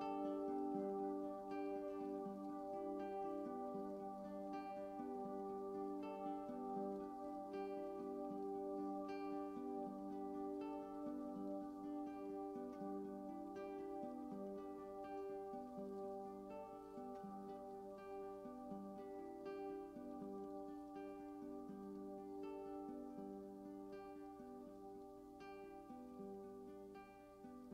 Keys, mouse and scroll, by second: 0.1 typing, 1.1 click, 1.9-3.9 drag, 5.1 click, 12.3 ctrl+s, 13.1 ctrl+alt+click, 18.0-20.3 drag, 20.3 ctrl+s, 20.6 alt+a, 24.3 alt+click.